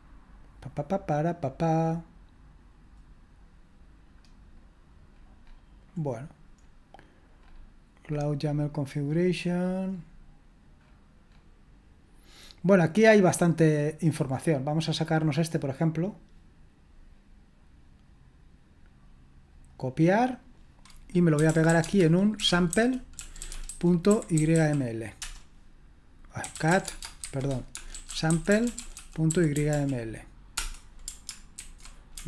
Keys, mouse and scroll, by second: 14.1-19.9 drag, 20.4 click, 21.1-25.0 typing, 21.1 click, 25.1 Return, 26.2-30.2 typing, 30.5 Return, 31.6 ctrl+alt+v.